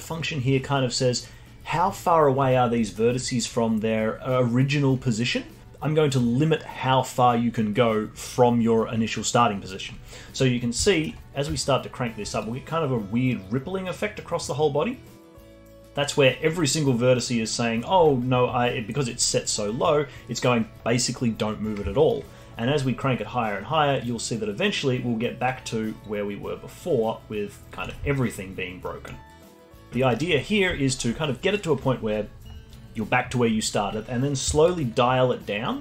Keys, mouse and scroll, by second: 2.9 middle click, 10.6-10.9 scroll down 1, 10.9-12.4 alt+middle drag, 12.4-15.5 shift+drag, 18.3 scroll down 2, 19.6 scroll up 2, 20.4 scroll up 1, 22.1-25.1 shift+drag, 28.2-29.2 alt+drag, 29.2 alt+middle click, 30.1 alt+click, 30.9-33.9 alt+middle drag, 34.6-35.8 shift+drag.